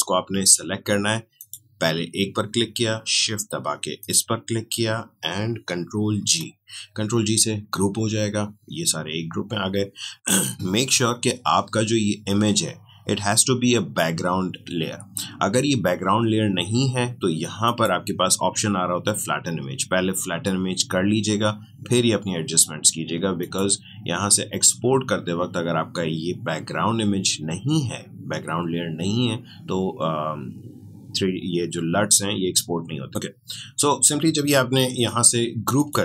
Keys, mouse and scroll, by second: 3.9 shift+click, 6.1 ctrl+g, 17.6 click, 23.4 click, 33.1 Escape, 35.0 click.